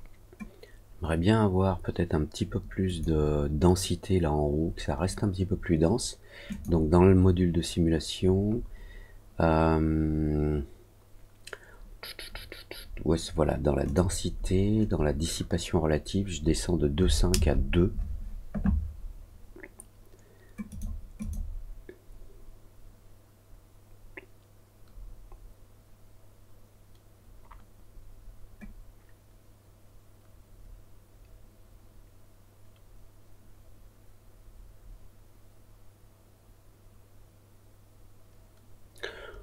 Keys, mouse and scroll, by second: 2.8 click, 6.4 click, 8.5 middle click, 8.5 scroll down 1, 13.8 click, 20.6 click, 21.1 click.